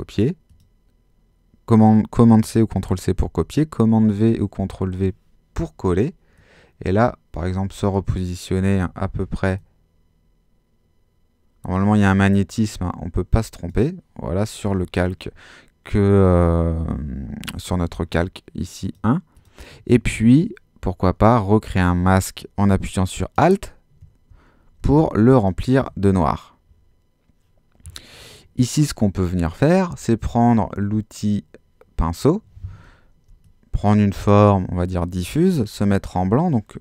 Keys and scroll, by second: 4.0 super+v, 8.7 super+-, 24.8 alt+super+z.